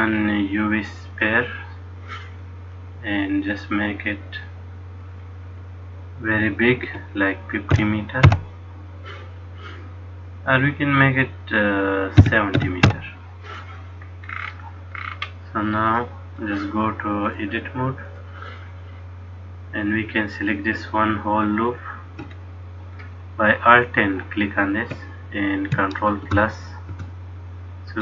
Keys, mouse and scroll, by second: 3.1 click, 5.2 click, 10.7 click, 14.4-15.1 scroll down 4, 15.1-16.0 scroll down 7, 16.0 middle click, 16.0-17.4 scroll down 3, 17.4 click, 23.0 alt+click, 26.3 ctrl+KP_Add.